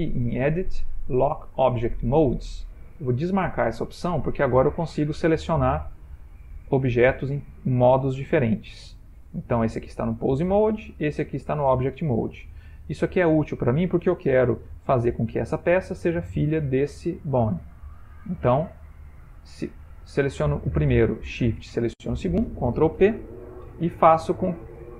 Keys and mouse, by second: 5.1 click, 6.7 click, 7.9 click, 8.4 click, 11.0 click, 14.8 g, 16.2 click, 17.0 g, 18.8 click, 21.6 shift+click, 22.8 ctrl+p.